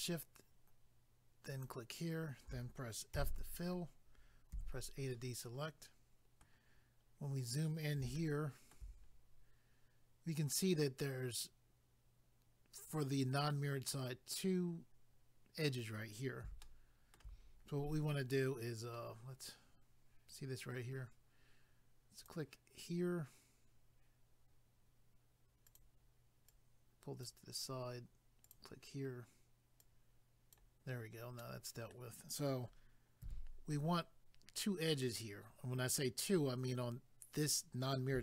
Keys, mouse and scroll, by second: 1.5 shift+click, 1.6 shift+click, 5.1 middle click, 5.1 a, 7.0 scroll up 1, 8.2 shift+middle click, 9.1 scroll up 1, 16.6 shift+middle click, 17.4 scroll down 1, 22.2 click, 22.3 click, 25.7 click, 25.8 click, 26.5 click, 28.4 click, 28.5 click, 29.8 click, 29.8 click, 31.4 middle click, 33.2 a.